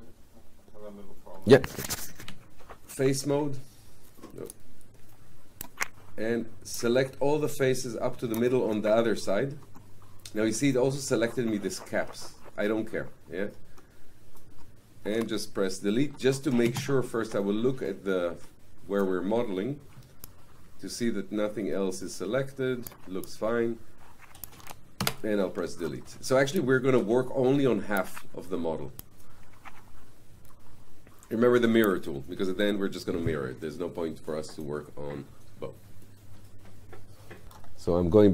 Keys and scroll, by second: 2.2 F8, 16.7 space.